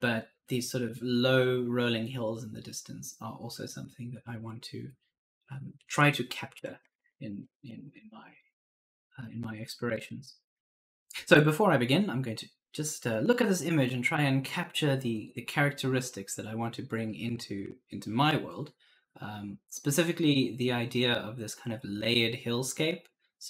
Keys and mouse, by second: 6.6 Left.